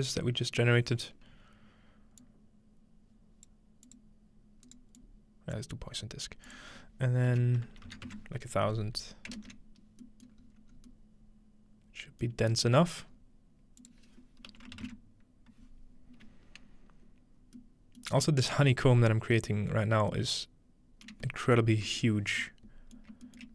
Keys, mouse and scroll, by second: 2.2-4.8 drag, 5.0 click, 6.5 click, 10.4-11.5 middle drag, 10.4-11.5 scroll up 2, 13.1-15.1 scroll up 2, 13.8-15.5 shift+drag, 16.7-17.6 scroll down 2, 17.6-18.7 middle drag, 19.5-20.1 middle drag, 21.1 middle click, 21.4 scroll down 2, 21.8-22.4 middle drag, 23.0 shift+middle drag.